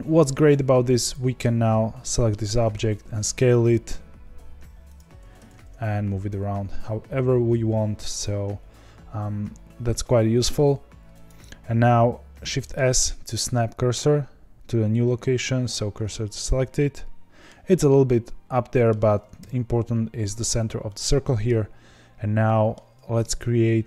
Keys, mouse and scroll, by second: 1.1 click, 2.0-2.6 middle drag, 2.6 s, 5.2 g, 16.4-19.4 middle drag, 19.4 KP_7, 20.8-23.8 middle drag.